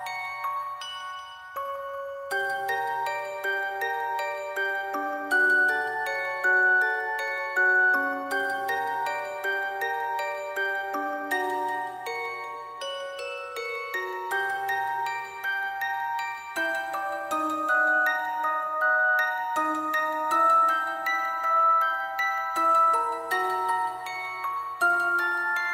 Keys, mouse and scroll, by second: 0.0 alt+click, 0.5 double click, 1.6 ctrl+click, 1.8 shift+click, 2.7 alt+click, 3.3 ctrl+click, 3.7 double click, 4.0 ctrl+click, 5.1 ctrl+click, 5.3 shift+click, 5.9 alt+click, 6.1 shift+click, 6.2 alt+click, 6.9 ctrl+s, 7.1 double click, 8.3 alt+click, 8.5 shift+click, 10.0 alt+click, 10.1 alt+click, 10.9 typing, 10.9 alt+click, 13.9 typing, 14.1 shift+click, 15.4 typing, 16.9 shift+click, 20.0 w, 20.2 shift+click, 24.9 alt+click.